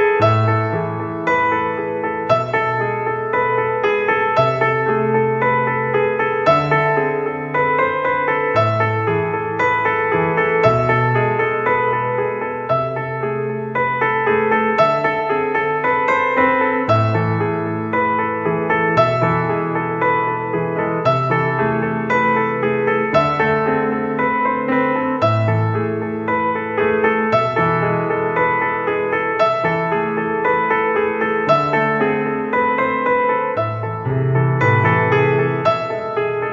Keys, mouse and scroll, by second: 3.5 click, 4.1 w, 5.2-7.8 typing, 5.4-6.7 drag, 6.9-8.0 drag, 8.6 click, 9.0 KP_1, 9.4 Tab, 9.4 click, 10.2-13.2 typing, 13.5 middle click, 14.1 click, 14.7 middle click, 15.0 click, 15.7 middle click, 15.8-16.8 drag, 16.8 middle click, 17.3 middle click, 17.4 click, 17.8 middle click, 18.4 middle click, 18.6-19.0 drag, 19.0 middle click, 19.4 click, 19.9 middle click, 20.2-20.8 right drag, 20.8 ctrl+a, 21.9 right click, 22.0 click, 22.0 right click, 22.7 g, 24.7-25.3 drag, 25.3 middle click, 25.4 s, 26.2-26.9 drag, 26.6 s, 28.8 s, 31.2 click, 32.4 middle click, 33.2 click, 33.9 middle click, 34.6 g.